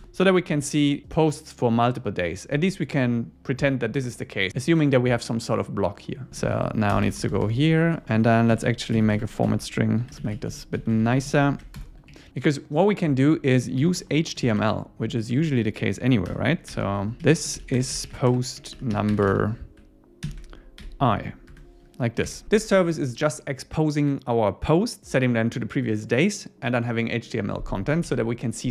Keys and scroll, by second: 0.0 Return, 6.4 super+Right, 6.5 Left, 8.2 Left, 9.2 Left, 9.4 Right, 10.2 super+Right, 10.3 Left, 10.8 Right, 11.0 alt+shift+Left, 12.1 Up, 12.3 shift+super+Left, 15.3 Tab, 16.3 Return, 21.5 Tab, 22.3 super+s, 28.0 super+s.